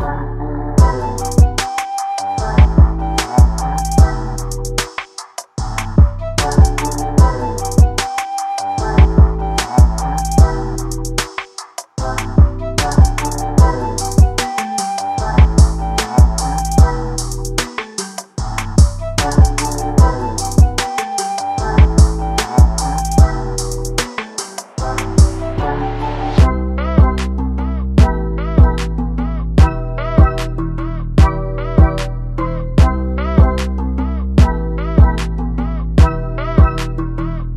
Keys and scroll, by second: 3.8 ctrl+=, 20.7 ctrl+a, 29.7 ctrl+0, 36.9 ctrl+t.